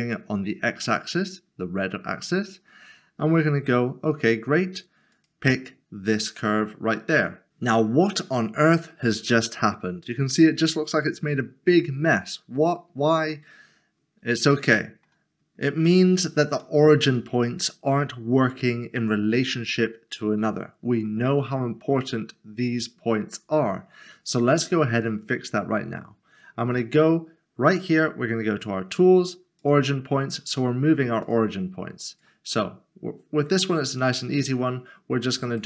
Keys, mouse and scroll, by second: 5.1 click, 9.7 middle click, 14.6 middle click, 16.6 middle click, 28.5 click, 33.6 right click, 35.5 click.